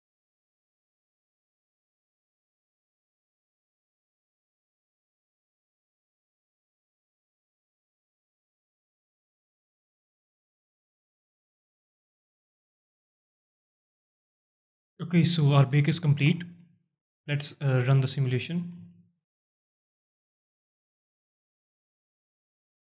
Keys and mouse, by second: 17.3-17.8 alt+middle drag, 18.2 alt+middle drag, 18.7 space.